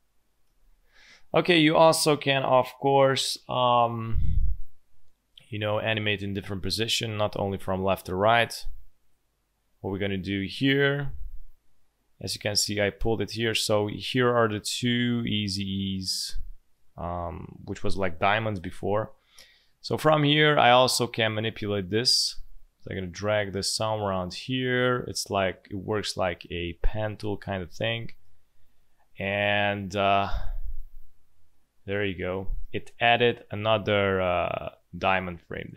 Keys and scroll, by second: 0.3 space.